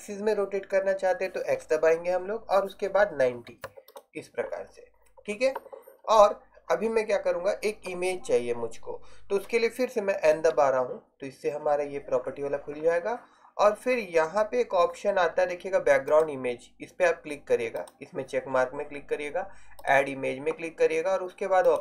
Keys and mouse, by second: 10.4 n, 16.2-17.8 drag.